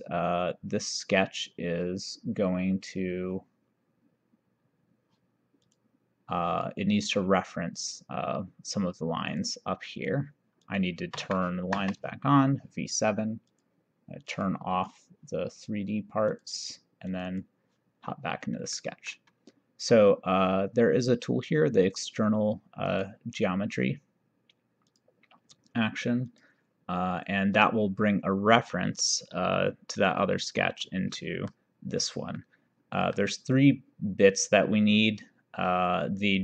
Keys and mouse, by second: 5.6 click, 9.4 click, 11.2 v, 11.8 7, 13.5 click, 16.3 click, 18.8 middle click, 22.9 click, 24.9 click, 26.4 click, 27.6 click, 29.6 click, 31.2 middle click, 32.5 middle click, 34.4 click.